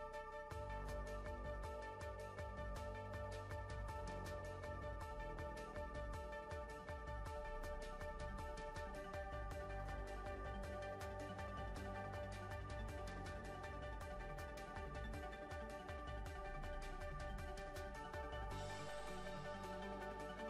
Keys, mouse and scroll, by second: 0.0 click, 0.8 click, 1.2-3.1 middle drag, 3.1 right click, 3.7 s, 5.1 middle click, 6.0 s, 6.9 KP_1, 7.4 click, 8.0 middle click, 8.4 click, 9.0 e, 9.4 middle click, 9.7 click, 10.3 middle click, 10.7 s, 11.3 middle click, 12.1 e, 12.4 s, 13.3 s, 13.7 w, 14.4 middle click, 15.7 middle click, 15.8 right click, 16.5 middle click, 17.0 click, 17.9 ctrl+r, 19.2 right click, 20.0 click.